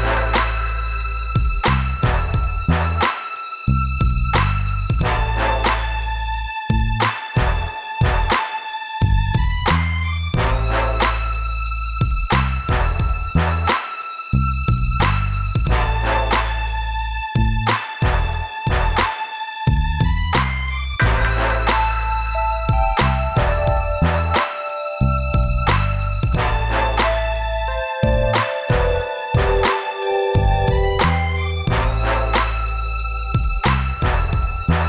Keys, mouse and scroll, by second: 0.4 click, 1.1 click, 2.1 click, 4.3 click, 5.3 click, 6.8 click, 7.8 click, 9.2 click, 10.1 click, 11.6 click, 13.2 scroll up 2, 14.2 right click, 15.1 click, 15.9 click, 19.5 click, 20.0 click, 20.6 click, 21.3 scroll down 1, 22.1 scroll up 2, 23.2 click, 23.9 click, 24.4 scroll up 2, 25.9 click, 27.1 click, 28.1 click, 29.2 click, 30.7 click, 32.8 click, 34.0 click.